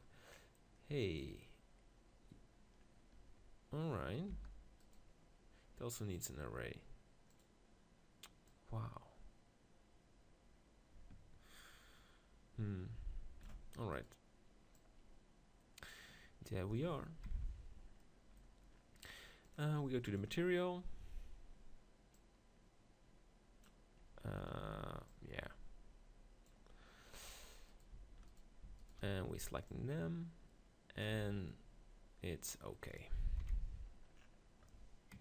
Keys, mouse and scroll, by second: 0.1 middle click, 1.0-4.3 right drag, 4.3 g, 7.4-10.5 drag, 13.9-15.9 right drag, 14.8-16.5 drag, 22.1-24.0 drag, 25.1-26.8 drag, 26.8-29.7 middle drag, 27.2 Tab, 29.7-30.9 drag, 29.7-30.7 right drag, 31.1 Tab, 33.4 KP_7, 33.8 Tab.